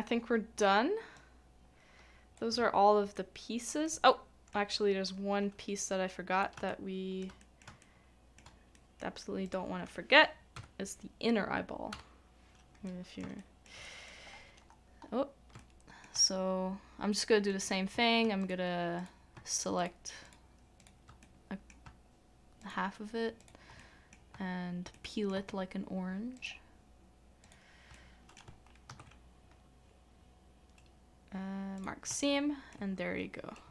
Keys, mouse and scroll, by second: 3.1 shift+middle click, 4.1 shift+middle click, 6.7 shift+middle click, 7.4 shift+middle click, 7.8 shift+middle click, 12.9 middle click, 13.4 shift+middle click, 14.3-15.0 scroll down 1, 15.6 shift+middle click, 19.8 shift+click, 21.2 middle click, 22.6 shift+click, 23.4 shift+click, 23.8 middle click, 24.9 shift+middle click, 26.3 shift+click, 27.4 shift+click, 27.9 middle click, 28.9 ctrl+e, 32.2 shift+middle click.